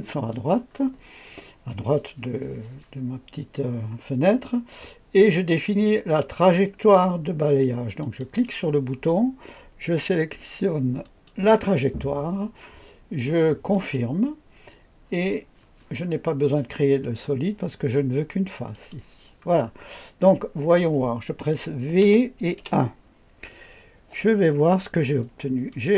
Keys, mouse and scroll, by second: 8.0 click, 11.0 click, 13.7 click, 18.7 click, 19.9-20.5 scroll up 1, 20.5-22.0 scroll down 1, 22.0 v, 22.6 KP_1, 24.6-25.7 scroll up 1, 25.7 click.